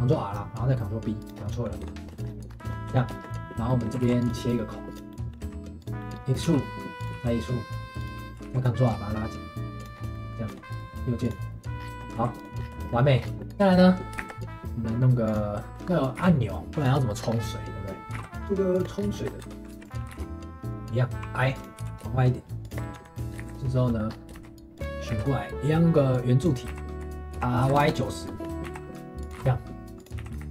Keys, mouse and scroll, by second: 1.5 middle click, 1.8 Tab, 2.1 shift+middle click, 2.5 scroll up 2, 2.7 shift+middle click, 2.9 Tab, 3.1 shift+middle click, 4.0 ctrl+r, 5.1 middle click, 5.4 3, 5.8 click, 6.0 middle click, 6.4 e, 7.1 e, 8.4 ctrl+r, 10.1 middle click, 10.5 Tab, 10.7 right click, 11.8 scroll down 3, 12.0 middle drag, 12.1 ctrl+s, 12.8 shift+middle click, 13.2 scroll up 2, 13.4 shift+middle click, 14.2 shift+a, 15.7 shift+middle click, 15.9 scroll up 3, 16.1 g, 17.1 shift+middle drag, 17.3-18.1 scroll up 2, 18.1 g, 18.9 scroll up 2, 19.1 shift+middle drag, 19.4 Tab, 19.7 3, 19.8 click, 20.1 g, 22.8 middle click, 22.9 Tab, 23.2 middle drag, 23.4 shift+a, 23.9 middle drag, 24.1 scroll up 2, 24.3 shift+s, 25.1 shift+a, 26.7 s, 28.2 middle click, 28.6 s.